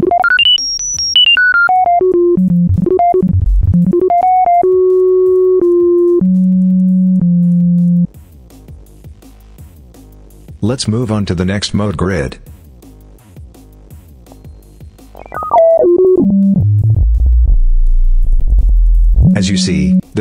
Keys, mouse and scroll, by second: 9.5 click, 12.5 click, 14.1-20.0 drag.